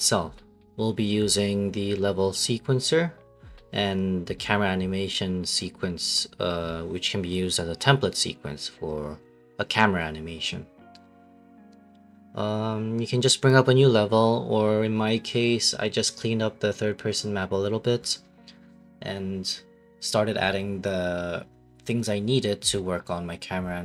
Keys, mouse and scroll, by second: 15.5 ctrl+space, 18.5 right click, 18.9 right click.